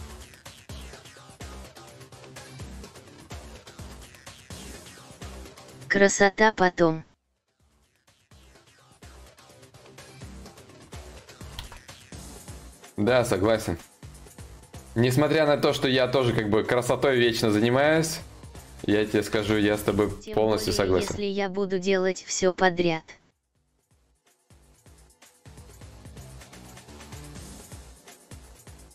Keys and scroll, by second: 19.2 ctrl+z, 19.4 ctrl+z, 19.4 ctrl+y, 19.8 ctrl+y, 20.3 ctrl+z.